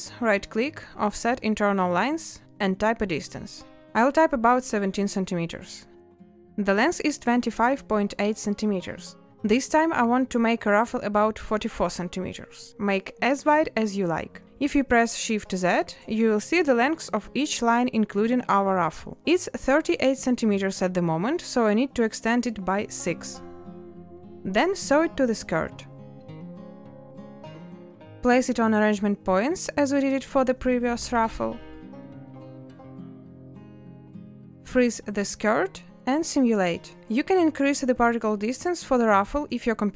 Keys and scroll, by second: 3.2 Return, 22.1 6, 23.0 Return, 25.3 n, 27.0 a, 34.9 ctrl+space.